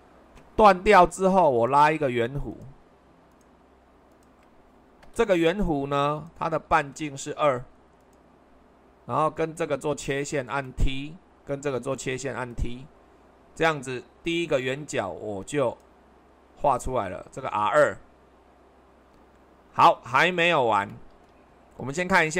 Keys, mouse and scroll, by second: 6.8 shift+r.